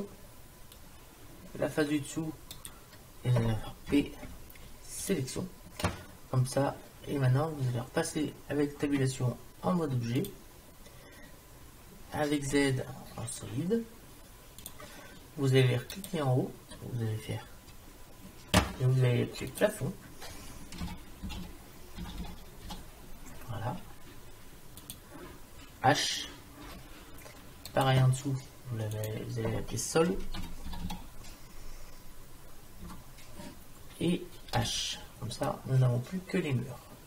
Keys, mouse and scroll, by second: 2.6-3.9 right drag, 3.9 p, 8.9 Tab, 12.6 z, 16.0-17.9 drag, 19.5-21.5 drag, 26.7 h, 27.7-29.0 drag, 29.0 middle click, 29.6-30.7 drag, 34.6 h, 35.5-37.0 middle drag.